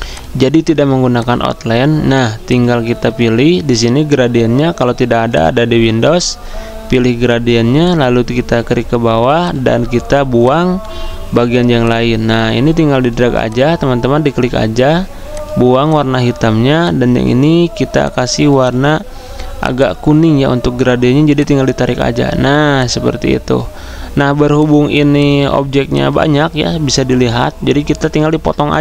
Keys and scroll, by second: 28.3 ctrl+z.